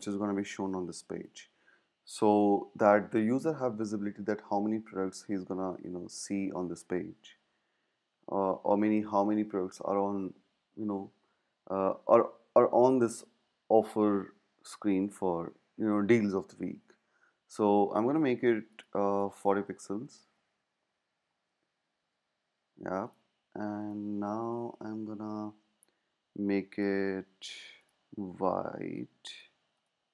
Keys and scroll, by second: 20.0 Up, 20.1 Up, 22.0-25.1 Up.